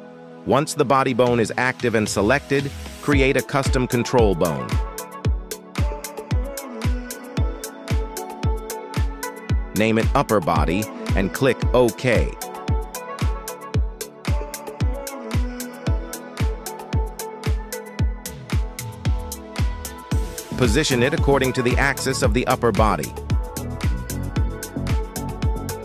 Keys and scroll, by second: 2.0 g, 2.4 Escape, 8.6-10.3 typing, 11.6 Return, 13.5 KP_3, 14.6 g, 15.2 Tab, 16.6 g, 17.3 Escape, 18.6 shift+s, 21.1 Tab, 22.1 shift+s, 24.2 g, 24.7 z.